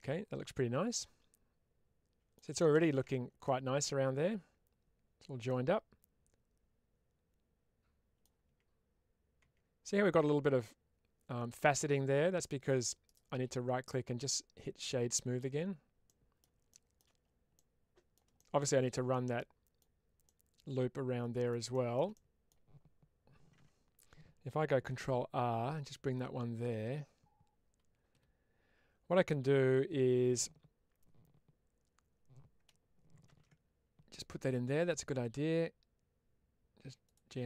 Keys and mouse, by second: 2.6 shift+space, 3.3-3.7 middle drag, 5.3-8.1 middle drag, 15.3 Tab, 15.9 middle click, 17.4 middle click, 18.3 shift+middle click, 19.0 middle click, 20.1-21.3 middle drag, 22.0 middle click, 36.9 click.